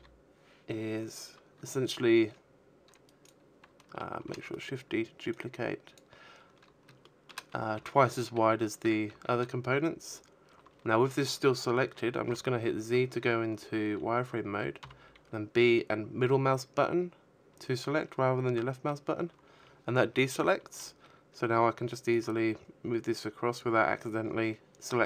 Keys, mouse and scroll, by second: 1.5 shift+d, 1.9 right click, 2.6 click, 4.3 shift+middle click, 9.5 z, 12.1 b, 19.4 click, 22.6 a, 23.2 z, 24.0 shift+middle click.